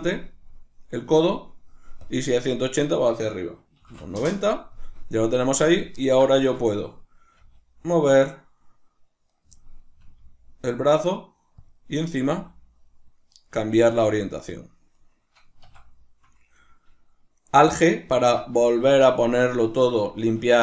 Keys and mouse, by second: 0.3-4.3 middle drag, 4.3 Return, 4.3-4.7 drag, 4.7-5.7 middle drag, 5.7 right click, 6.0-9.3 ctrl+middle drag, 7.3 g, 9.3 right click, 10.0-11.7 middle drag, 10.0 g, 11.7 click, 12.0 right click, 12.3 g, 13.4 right click, 13.9-15.1 middle drag, 13.9 g, 15.1 right click, 15.6 a, 18.9-20.6 shift+middle drag.